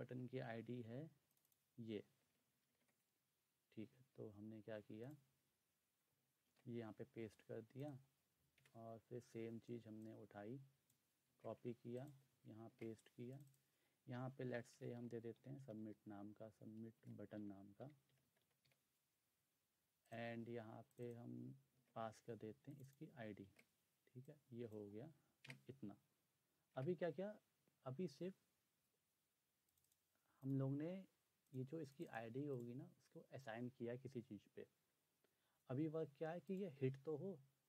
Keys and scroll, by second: 2.5 ctrl+c, 2.7 ctrl+c, 6.5 ctrl+v, 8.6 Return, 11.2 ctrl+c, 12.6 ctrl+v, 14.2-19.2 typing, 21.7 ctrl+c, 23.4 ctrl+v, 25.5 BackSpace, 26.8 BackSpace.